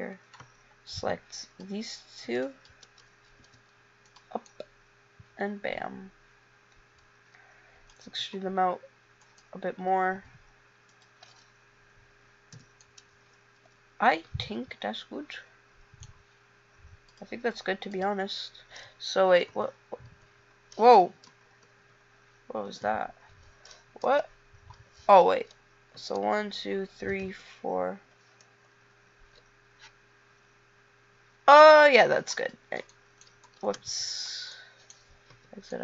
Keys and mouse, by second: 0.6 b, 2.4 b, 3.5 e, 4.7 middle click, 8.2 e, 10.3 e, 12.7 a, 19.6 0, 20.2 0, 21.4 ctrl+z, 21.8 ctrl+z, 22.7 9, 24.2 ctrl+z, 25.5 KP_1, 26.2 KP_2, 26.6 KP_3, 27.4 KP_5, 33.1 click, 33.8 space, 35.5 KP_5.